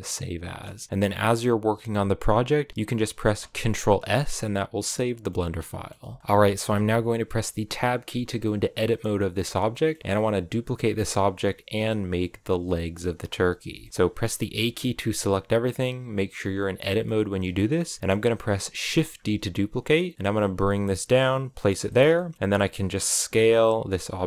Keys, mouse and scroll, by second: 5.1-7.5 middle drag, 7.5 Tab, 8.0 scroll down 1, 8.3-14.1 middle drag, 14.1 a, 14.4 a, 16.7-19.0 middle drag, 19.0 shift+d, 21.7 shift+middle click, 22.3-22.9 scroll up 2, 22.9 s.